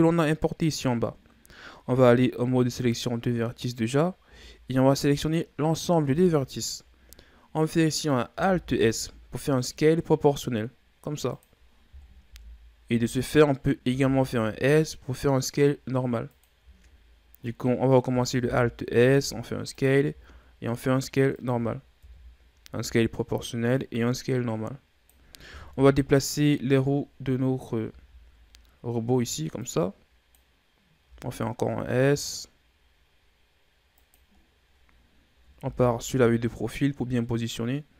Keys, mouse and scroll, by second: 1.8 ctrl+Tab, 4.2 a, 6.0 KP_3, 7.6 middle click, 8.4 alt+s, 12.2 KP_1, 13.2-13.8 ctrl+scroll up 1, 13.8 s, 16.6-17.5 shift+scroll down 3, 17.5 middle click, 18.2 alt+s, 20.0 s, 22.0 KP_3, 23.7-25.7 drag, 25.7 KP_1, 26.8-27.5 scroll down 5, 27.5-29.5 scroll up 4, 29.5-31.0 drag, 31.0 s, 34.3-35.6 scroll down 6, 35.6 KP_3, 36.5 scroll up 4.